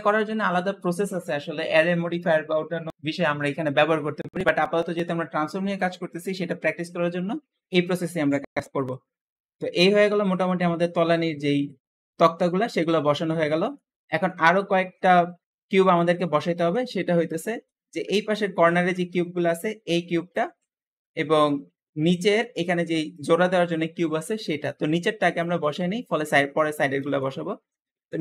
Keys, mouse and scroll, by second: 8.4 scroll down 1, 8.7-11.8 middle drag, 12.9-13.3 scroll down 5, 13.3-14.3 middle drag, 14.3-14.8 scroll up 4, 14.8 shift+middle click, 15.2-15.7 scroll up 1, 15.7 click, 16.4 KP_Decimal, 16.9 scroll up 1, 17.2-18.2 middle drag, 18.2 scroll up 1, 18.3-20.6 middle drag, 20.6 scroll down 1, 20.9-25.6 middle drag, 25.7-26.4 scroll down 5, 26.4 middle click, 27.3-27.7 scroll up 1, 27.7-28.2 middle drag.